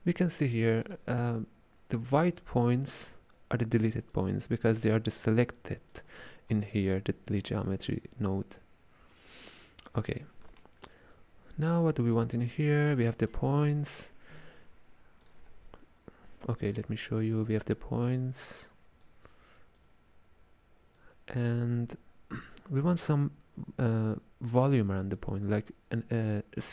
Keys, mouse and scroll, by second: 0.9-4.1 drag, 4.1-6.0 drag, 7.6-9.7 drag, 9.7-11.2 middle drag, 11.2 click, 13.1-15.3 ctrl+middle drag, 15.3-22.9 drag.